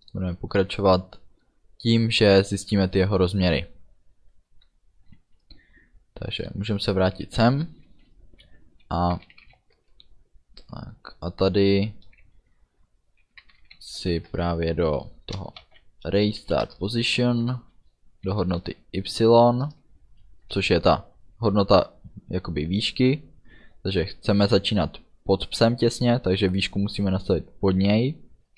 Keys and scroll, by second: 9.2 r, 9.9 BackSpace, 13.5 r, 14.3 BackSpace, 15.4 a, 15.7 z, 16.5 Down, 16.7 Return, 17.2 ., 19.7 Return, 20.5 space.